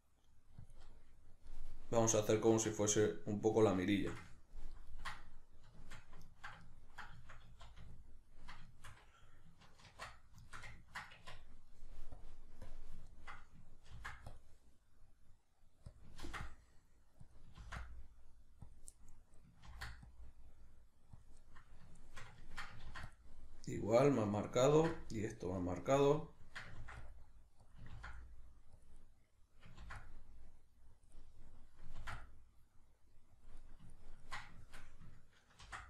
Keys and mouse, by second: 0.7 click, 0.9-2.5 middle drag, 2.5 Tab, 2.9-12.2 middle drag, 7.5 z, 9.9 ctrl+2, 11.1 Tab, 12.2 click, 13.1-16.0 ctrl+middle drag, 13.9 ctrl+r, 16.0 click, 16.2 ctrl+r, 17.3 click, 17.6 ctrl+r, 18.7 click, 18.9-21.3 middle drag, 19.7 ctrl+r, 21.3 click, 21.4-24.5 middle drag, 22.9 ctrl+r, 24.5 click, 24.7 ctrl+r, 26.0 click, 26.2-27.7 ctrl+middle drag, 26.8 ctrl+r, 27.7 click, 27.9 ctrl+r, 28.8 click, 29.0-31.0 middle drag, 29.8 ctrl+r, 31.0 click, 31.1 middle click, 32.0 ctrl+r, 33.5 click, 33.6-35.6 middle drag, 35.6 ctrl+r.